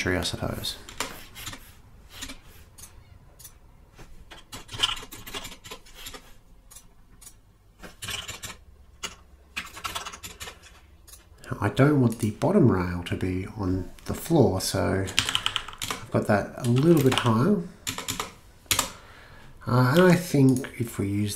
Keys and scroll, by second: 0.9 Return, 1.4 Return, 2.2 Return, 4.0-5.8 typing, 6.0 Return, 7.8-11.5 typing, 9.0 Tab, 9.5 Right, 14.9-16.3 typing, 16.8 Return, 17.2 Return, 17.9 Return, 18.7 Return, 20.0 d.